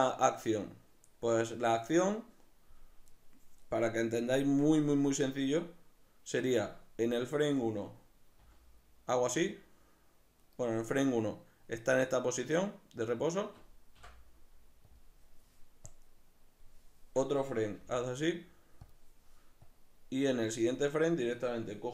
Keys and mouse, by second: 7.1 right click, 8.4 g, 10.5 right click, 14.0 i, 15.9-18.9 drag, 17.7 g, 19.6-21.0 drag, 21.0 right click.